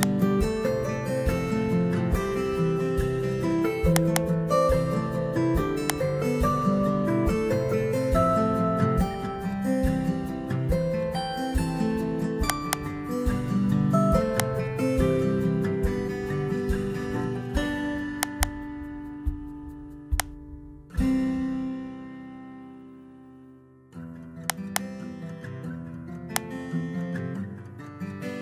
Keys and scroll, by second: 2.7 ctrl+x, 6.6 Return, 7.5 Up, 9.6 ctrl+v, 16.4 ctrl+x, 21.0 Return, 21.7 Up, 22.6 ctrl+v, 28.3 ctrl+x.